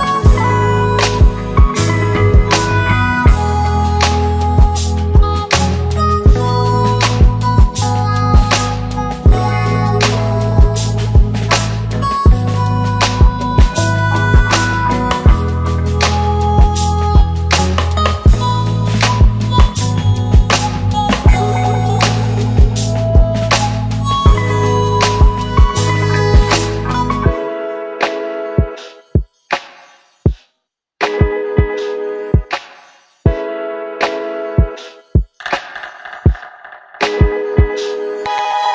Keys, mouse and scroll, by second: 4.7 click, 6.1 click, 6.8 shift+click, 7.6 u, 8.8-9.4 click, 11.4-11.9 click, 13.0 drag, 18.9 space, 24.8 space, 25.9 click, 27.1 click, 33.0 space, 37.8 space.